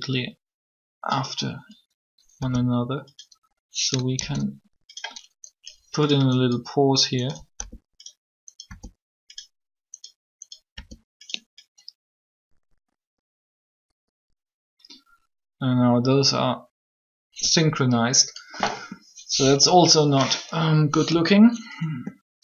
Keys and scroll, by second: 2.2 g, 4.2 shift+d, 7.5 g, 8.6 g, 12.0 g.